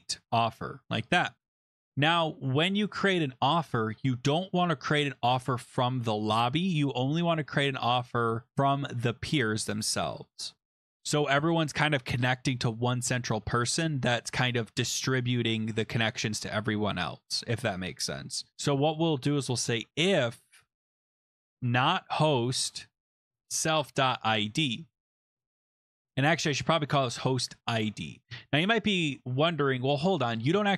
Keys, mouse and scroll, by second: 0.0-1.0 typing, 2.2 shift+Return, 19.4-20.2 typing, 21.3-24.2 typing, 24.3 Tab, 26.0 click, 26.0 Tab, 26.5 click, 27.3-28.3 typing, 30.2 click, 30.3 click.